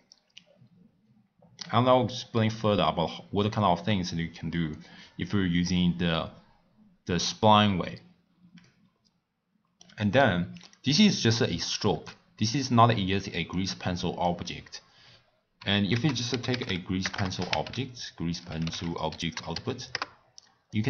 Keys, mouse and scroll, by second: 8.6-10.7 middle drag, 10.7 click, 13.5-15.9 drag, 15.9 ctrl+a, 17.1 BackSpace.